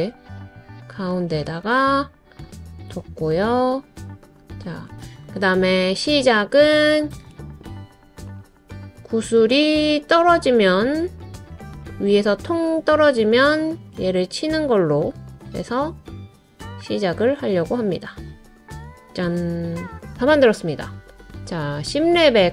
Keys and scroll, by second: 1.4 super+a.